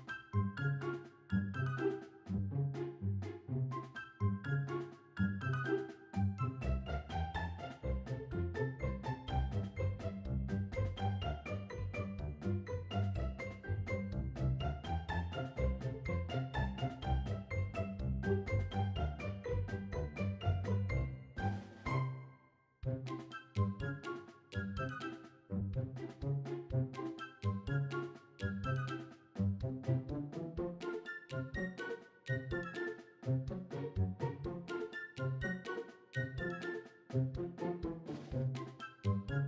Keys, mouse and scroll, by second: 1.7 `, 3.9-5.6 scroll up 8, 5.6 click, 6.1 shift+middle drag, 6.8 scroll up 1, 7.1-7.5 shift+middle drag, 8.1 click, 8.6 click, 9.7 Tab, 10.5 click, 10.5 a, 11.2 right click, 12.6 right click, 14.0 right click, 14.9 right click, 16.4 click, 18.0 click, 19.3 click, 21.8 click, 23.2 click, 23.8 click, 24.4 click, 25.8 click, 27.7-29.0 drag, 30.4 click, 31.6-32.7 drag, 33.7 click, 34.8-35.9 drag, 36.8 click.